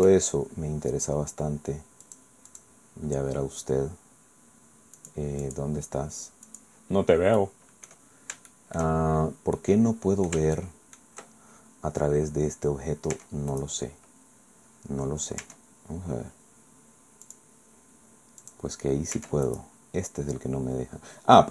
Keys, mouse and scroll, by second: 0.0 Tab, 2.0 click, 2.5 click, 5.0 click, 5.4 click, 6.5 click, 7.4 click, 8.1-8.7 scroll down 2, 8.5 shift+click, 9.0-9.6 shift+scroll up 1, 9.6 click, 10.6 shift+click, 13.2 Tab, 13.5 click, 15.4 Tab, 17.2 click, 18.4 click, 19.2 Tab, 19.5 right click.